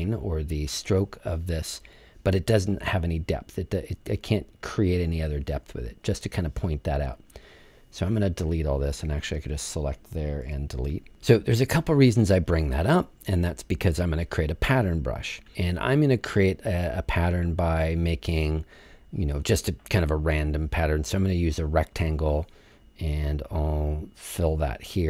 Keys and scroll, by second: 10.4 BackSpace.